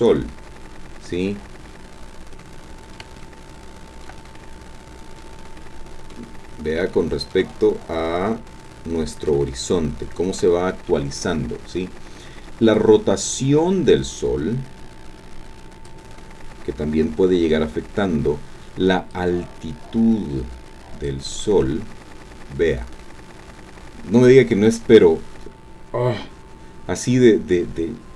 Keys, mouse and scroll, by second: 1.7 middle click, 1.7 scroll down 2, 3.2 shift+middle click, 3.4 shift+click, 4.4-5.4 shift+drag, 5.6 click, 6.9-9.5 shift+drag, 9.8 shift+click, 12.8-16.1 drag, 19.1-21.2 drag, 22.5-25.0 scroll down 2.